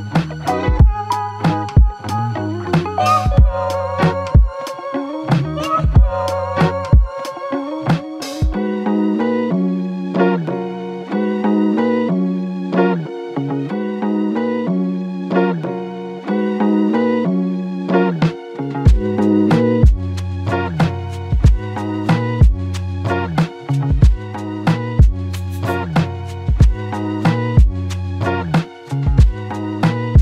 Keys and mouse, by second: 4.2 ctrl+click, 5.5 ctrl+click, 7.0 ctrl+click, 7.8 ctrl+i, 9.4 ctrl+click, 12.5 w, 14.2 alt+click, 23.2 ctrl+click, 24.2 ctrl+click.